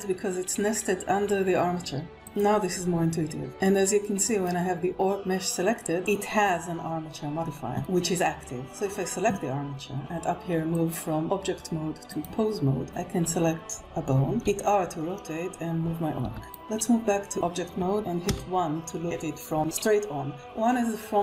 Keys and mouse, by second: 2.1 click, 3.7 click, 5.6 click, 11.4-12.7 drag, 14.9 r, 16.7 Escape, 17.0-18.4 drag, 18.6 KP_1.